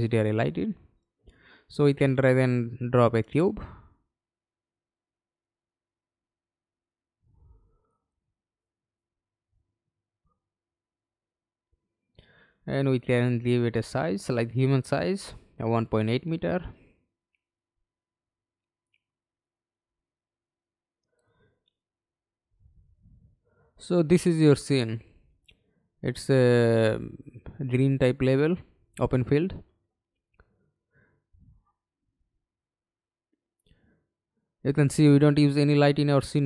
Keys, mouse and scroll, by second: 4.3 middle click, 4.9 f, 5.6 alt+space, 5.8 alt+click, 6.4 scroll down 3, 7.3 alt+click, 9.0 double click, 10.8 BackSpace, 11.3 8, 11.9 Return, 13.6 1, 14.6 Return, 15.2 double click, 16.2 Right, 16.7 BackSpace, 18.0 8, 18.3 Return, 24.6 scroll down 1, 25.1 alt+click, 27.2 alt+right click, 28.2 alt+click, 34.1-34.7 scroll down 3, 34.7-35.5 scroll up 3, 35.5 alt+click.